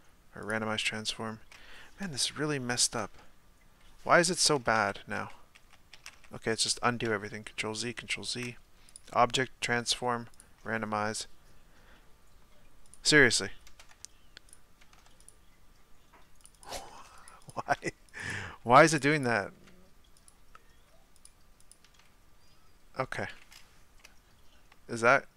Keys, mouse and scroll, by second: 4.7 ctrl+z, 5.2 ctrl+z, 5.9 ctrl+z, 6.3 ctrl+z, 6.7 ctrl+z, 7.1 ctrl+z, 10.4-16.4 drag, 16.5-21.2 drag, 22.0-24.0 drag, 24.0-25.3 middle drag.